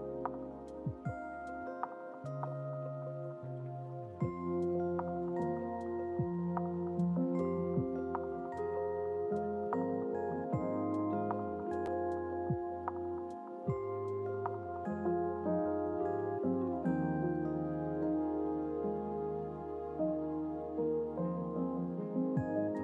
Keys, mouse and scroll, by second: 0.4-1.5 drag, 2.0-2.4 scroll up 2, 7.7 KP_0, 11.2 click, 12.2-14.6 drag, 16.8 click.